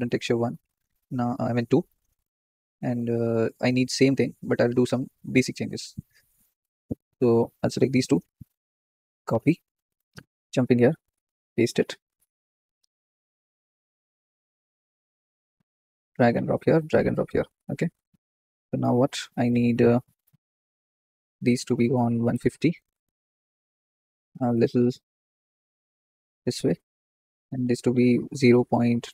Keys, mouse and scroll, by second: 1.9 click, 4.6-5.1 scroll down 10, 7.3-11.3 shift+drag, 11.3 ctrl+v, 14.0-16.2 drag, 16.7 click, 18.0 scroll up 2, 18.4 shift+middle click, 19.5-22.4 middle drag, 19.5-22.4 scroll up 3, 22.4-23.4 drag, 24.5-29.1 drag.